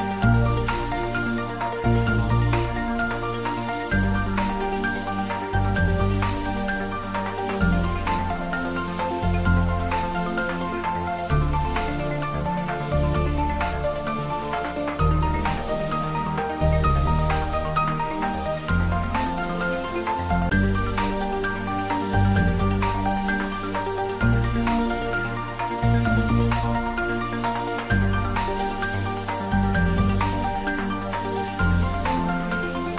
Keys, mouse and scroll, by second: 2.3-20.5 drag, 16.1-16.7 scroll up 1, 17.3 middle click, 18.0-19.1 scroll up 1, 20.2 click, 21.0 Tab, 21.4-23.1 scroll up 1, 23.1 click, 23.2 click, 24.5 alt+shift+click, 30.8 click, 31.6-32.7 scroll down 1, 32.7 click.